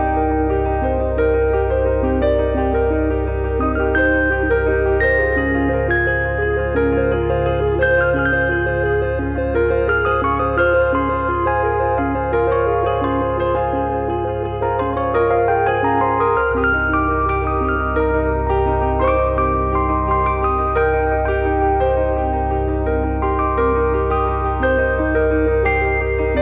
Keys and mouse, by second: 0.6 click, 1.1 f, 1.3 middle click, 1.6 shift+middle click, 2.6 click, 4.2 click, 4.9 click, 5.8 click, 7.0 click, 8.4 middle click, 9.0 click, 10.7 KP_3, 11.9 click, 12.8 click, 13.4 click, 14.0 click, 14.7 click, 15.3 click, 16.1 middle click, 16.7 shift+h, 16.9 middle click, 17.1 shift+h, 17.5 alt+z, 18.1 click, 19.7 click, 22.0 click, 25.4 click, 26.0 click, 26.3 click.